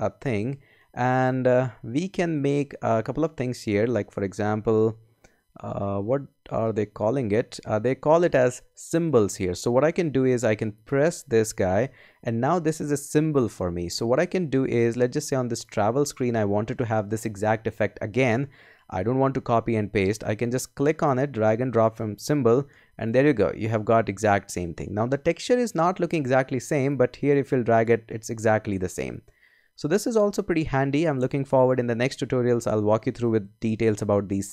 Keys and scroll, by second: 31.3 BackSpace.